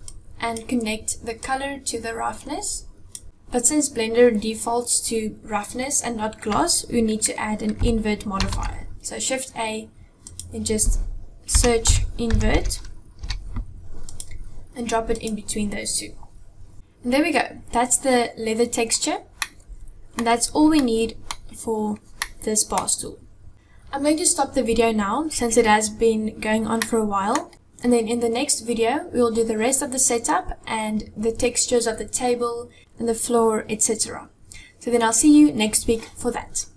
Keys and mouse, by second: 1.2-2.9 drag, 8.0 shift+a, 19.2 middle click, 22.0 middle click, 26.5 middle click.